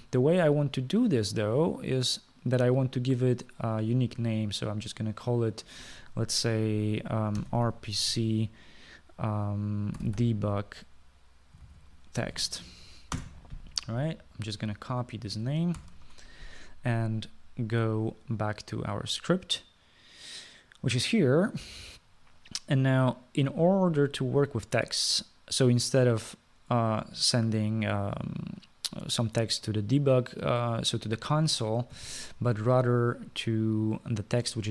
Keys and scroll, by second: 8.3-9.7 typing, 10.8-14.0 typing, 14.3 Return, 16.9 ctrl+c, 33.0 typing.